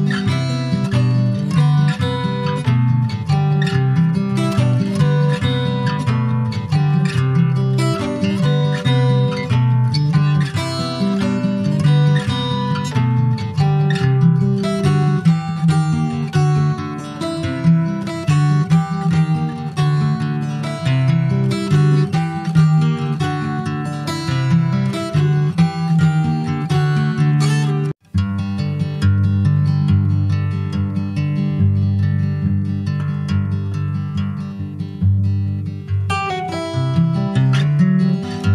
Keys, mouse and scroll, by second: 0.4 shift+click, 1.3 x, 2.3-2.7 scroll down 2, 2.7 middle click, 3.5 ctrl+s, 3.8 Tab, 4.7 /, 5.2 click, 5.6-5.9 scroll down 3, 5.9-7.3 middle drag, 7.3 ctrl+s, 7.3 click, 7.5 scroll down 4, 7.8-8.9 middle drag, 8.9 ctrl+s, 9.2 middle click, 9.5 ctrl+s, 9.6 ctrl+scroll down 1, 9.8 middle click, 10.1 a, 11.8 h, 12.1 click, 12.4-13.0 scroll up 2, 13.0 ctrl+s, 13.1 click, 13.4 shift+a, 15.1 click, 15.5 shift+a, 17.7 scroll up 4, 18.0-19.3 middle drag, 19.3-20.0 scroll up 11, 20.0-22.6 shift+middle drag, 22.6-24.4 drag, 24.4-27.6 middle drag, 27.6-30.6 drag, 30.6 Tab, 30.8 click, 31.5 ctrl+s, 31.5 click, 33.0 click, 34.2-37.2 drag, 37.3 click, 37.7-38.5 middle drag.